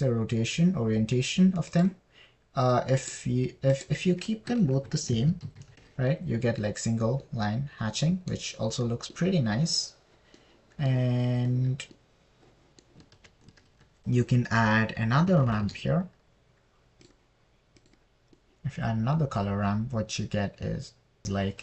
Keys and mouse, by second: 1.3-3.0 drag, 1.3-3.0 right drag, 4.4 click, 4.4 right click, 5.2-7.2 drag, 5.2-7.2 right drag, 6.7 KP_3, 8.0 middle drag, 11.8 middle click, 14.2 middle click, 14.6 ctrl+z, 15.1 shift+a, 19.3 drag, 19.7-21.2 middle drag.